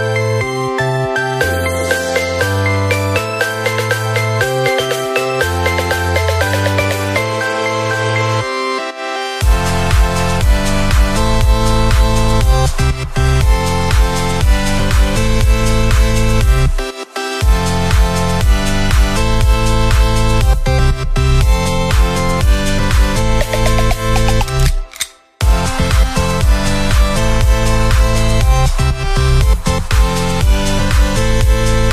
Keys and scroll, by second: 1.7 ctrl+-, 2.1 ctrl+0, 3.6 ctrl+=, 8.6 Up, 17.8 Left, 23.6 ctrl+[, 24.2 Down, 26.6 ctrl+[, 26.9 Down, 28.4 Down, 31.6 ctrl+z.